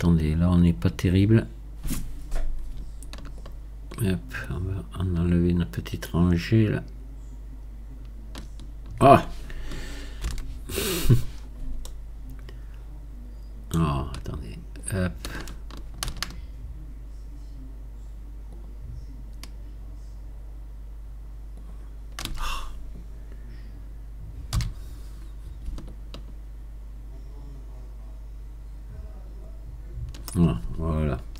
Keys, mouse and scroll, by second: 3.4-6.4 shift+drag, 10.3 ctrl+z, 11.4-11.9 scroll up 1, 11.9-14.8 shift+middle drag, 14.8-17.8 shift+drag, 18.5-21.5 ctrl+shift+drag, 24.5 b.